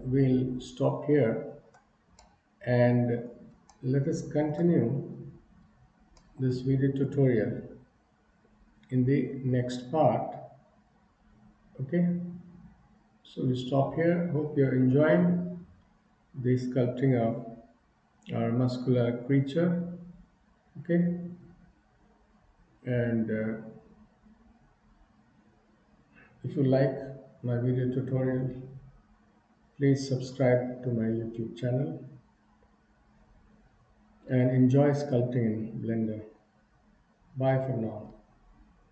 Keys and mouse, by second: 2.3-3.4 middle drag, 3.7 shift+middle click.